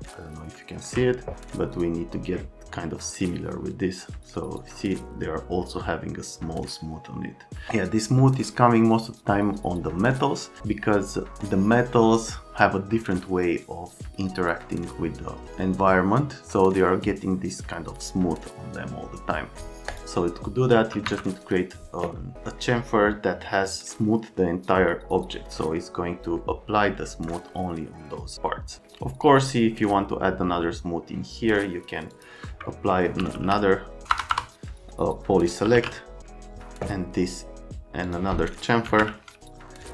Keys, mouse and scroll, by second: 1.8 click, 19.9 click, 20.7 F3, 21.1 F3, 21.4 click, 25.6 right click, 27.1 F3, 32.1 click, 32.9-34.3 typing, 35.4-36.2 typing, 38.0 click, 38.6-39.5 typing.